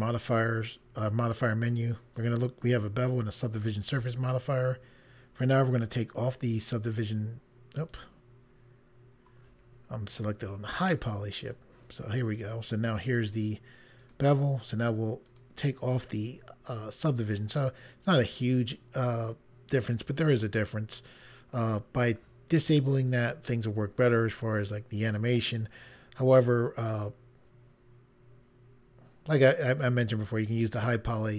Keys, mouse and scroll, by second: 2.1 click, 5.4 click, 7.9 click, 10.7 click, 14.0 click, 15.2 click.